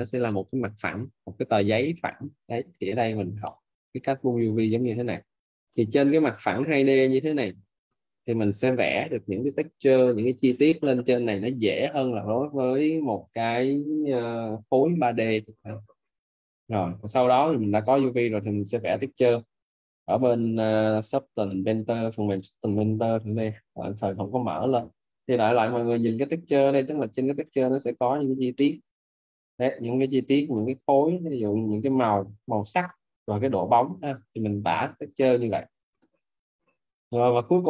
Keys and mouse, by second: 14.3 middle click, 22.1 click, 31.7 alt+right click.